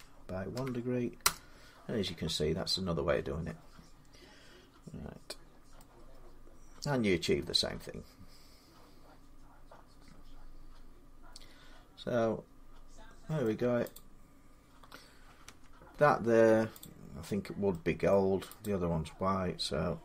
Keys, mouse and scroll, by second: 0.0-1.0 typing, 5.2 scroll down 1, 5.2-7.9 middle click, 5.2-5.6 scroll down 4, 5.2 y, 7.9-10.1 middle drag, 10.1 scroll, 13.2 middle click, 13.7 click, 15.2 Tab, 16.6 click, 17.0-17.5 scroll down 3, 17.9 middle click, 18.4 click.